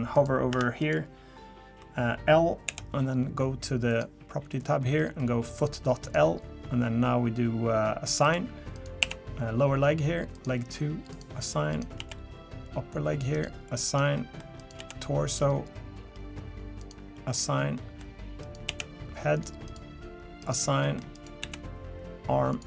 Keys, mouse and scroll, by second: 0.1 click, 0.5 Tab, 0.8 click, 2.7 l, 3.9 click, 5.0-5.7 scroll up 4, 6.0 click, 8.2 click, 8.7 click, 9.0 l, 10.3 click, 11.1 click, 11.7 click, 12.0 l, 12.9-13.3 scroll up 1, 13.3 click, 13.9 click, 14.2 middle click, 14.6 click, 14.8 l, 15.3-15.9 scroll up 5, 16.1-16.8 scroll up 3, 16.8 click, 17.3 click, 17.8 middle click, 18.4 click, 18.7 l, 19.3 click, 19.7 click, 20.4 click, 20.8 middle click, 21.1 click, 21.4 l, 22.5 click.